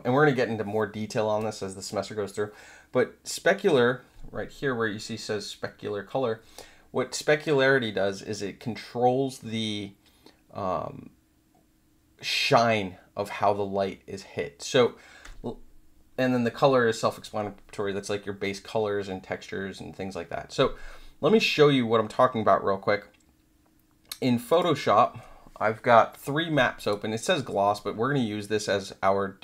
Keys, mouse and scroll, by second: 24.5 click, 26.8 click.